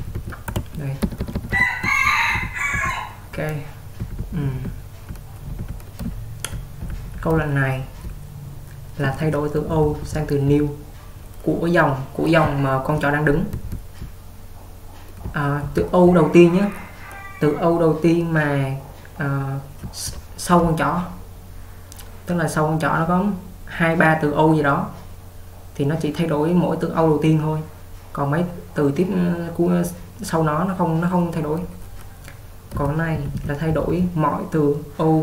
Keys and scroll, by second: 0.0-2.8 typing, 4.1-7.9 typing, 9.1-10.5 typing, 12.5-16.3 typing, 19.9 h, 32.6-34.5 typing.